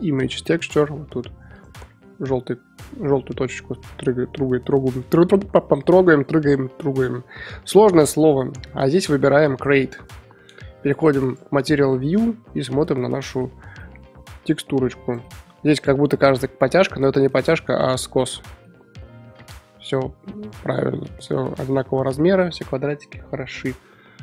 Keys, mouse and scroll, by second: 11.3 click, 11.8-12.2 middle drag, 12.2-13.0 scroll up 5, 13.0-13.6 middle drag, 13.6 scroll down 3, 13.8-15.0 middle drag, 15.0 click, 15.2 middle drag, 15.5 scroll up 3, 17.0 Tab, 17.4 middle click, 18.1 Tab, 18.3 scroll down 3, 18.9-21.7 middle drag, 21.7-22.3 scroll down 3, 22.5-24.2 middle drag.